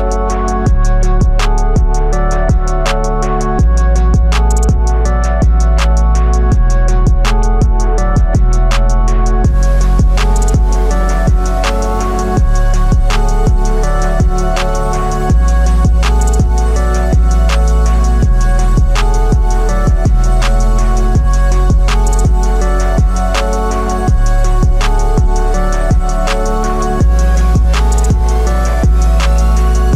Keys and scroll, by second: 23.3 ctrl+alt+z.